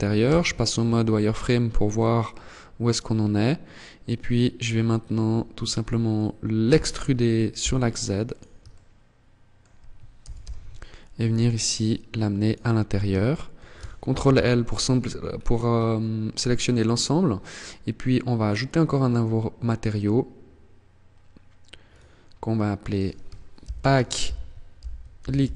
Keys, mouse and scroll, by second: 0.0-0.5 scroll up 1, 0.5 scroll down 2, 0.5 scroll down 2, 1.0-1.5 scroll up 3, 5.9 e, 7.7 click, 7.9 shift+middle click, 9.4 g, 11.9 click, 12.4 shift+middle click, 13.5 ctrl+l, 13.7-14.1 scroll down 3, 14.5 scroll down 4, 14.9-15.3 scroll up 5, 16.2 scroll down 1, 17.8 click, 21.1 click, 22.1 click.